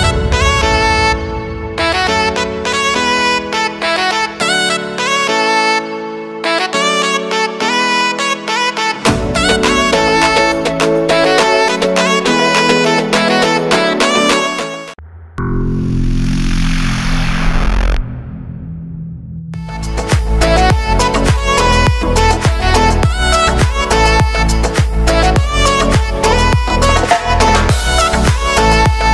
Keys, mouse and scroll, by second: 1.5 space, 3.6 click, 5.1 `, 7.1-8.9 drag, 12.1 k.